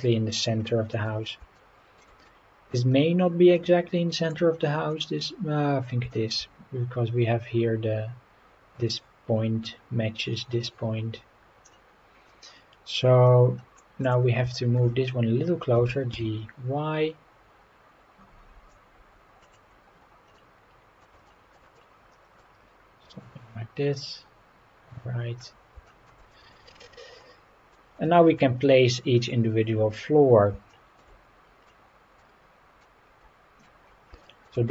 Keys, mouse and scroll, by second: 0.6-1.0 middle drag, 1.5-2.0 shift+middle drag, 2.2-2.7 middle drag, 3.5-4.3 middle drag, 4.9-5.8 middle drag, 6.1 shift+middle drag, 11.7-13.8 middle drag, 14.0 click, 14.5 shift+middle drag, 15.7 g, 16.1 y, 19.4 click, 19.8-20.2 scroll up 4, 20.3-21.0 middle drag, 21.2 shift+middle drag, 21.7-22.4 middle drag, 22.6-23.0 scroll down 1, 23.2-25.4 middle drag, 25.8 shift+middle drag, 26.3 middle drag, 26.7-27.2 scroll down 2, 27.2-27.7 middle drag, 28.0 shift+middle drag, 29.2 click, 30.7 shift+middle drag, 31.2 scroll up 1, 31.7-32.2 middle drag, 32.8-33.6 middle drag, 33.8 scroll down 3, 34.2 shift+middle drag.